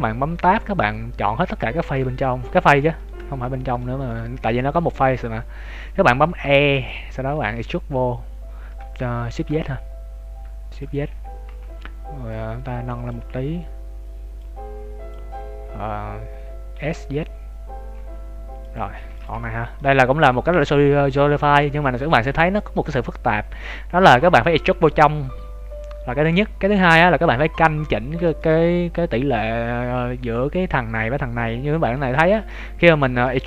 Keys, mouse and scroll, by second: 0.0-0.5 scroll down 3, 0.4 shift+middle click, 0.9 right click, 1.0 scroll down 2, 2.1 shift+right click, 2.8 middle click, 3.4 shift+right click, 3.7 middle click, 4.8 middle click, 5.6 scroll up 2, 6.4 e, 7.3 s, 11.1 KP_3, 11.4 z, 11.6-12.0 scroll up 4, 12.2 click, 14.4 click, 16.7 s, 19.0 ctrl+s, 19.3 z, 19.5-19.9 scroll down 3, 19.7 middle click, 21.8 shift+middle click, 22.5 KP_3, 22.8 KP_1, 23.2 z, 23.6 scroll up 1, 25.2 scroll up 2, 27.8-28.2 scroll up 3, 28.2 shift+middle click, 29.6 scroll up 1, 31.4 scroll down 3, 31.8 ctrl+z, 32.5-32.9 scroll down 2, 32.8 ctrl+z, 33.3 shift+middle click.